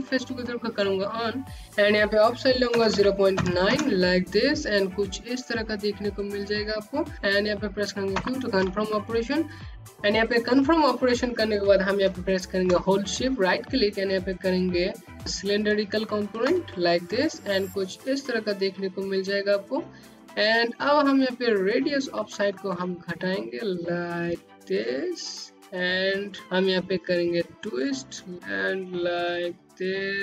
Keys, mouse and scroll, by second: 1.1 click, 1.7 KP_9, 2.0 KP_Enter, 6.7 q, 7.6 click, 8.2 q, 8.9-9.6 scroll down 1, 9.7 y, 19.6 click, 20.9 middle click, 26.4 middle click.